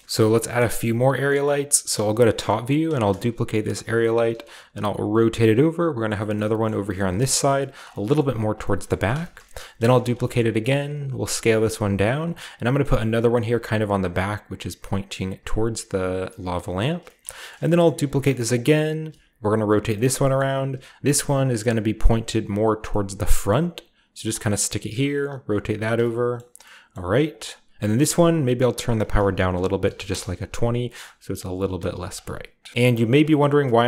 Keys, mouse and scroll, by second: 0.0 middle click, 0.4-2.1 scroll down 2, 2.2-3.1 scroll up 1, 2.9 shift+d, 3.7 click, 4.1 r, 4.5 z, 6.0 click, 6.3 middle click, 6.5-8.2 typing, 6.9 click, 7.7 click, 8.4 click, 9.4-10.2 scroll up 1, 9.8-11.0 typing, 10.0 click, 10.9 click, 12.1 click, 12.8-13.8 typing, 13.3 click, 13.7 click, 14.0 click, 15.3-16.6 typing, 15.4 click, 15.8 click, 16.1 click, 16.2 middle click, 16.8 click, 17.5-19.7 shift+scroll down 1, 17.9-20.4 shift+middle drag, 17.9-19.0 typing, 18.5 shift+click, 19.7 click, 20.7-21.9 typing, 21.2 click, 21.7 click, 22.6 click, 22.8 middle click, 23.6 typing, 24.2 click, 25.1-25.6 typing, 25.5 click, 25.8 click, 27.1 typing, 27.3 click, 28.9 click, 29.8-33.8 typing, 31.3 drag, 31.8 click, 32.0 click, 33.2 click, 33.4 click.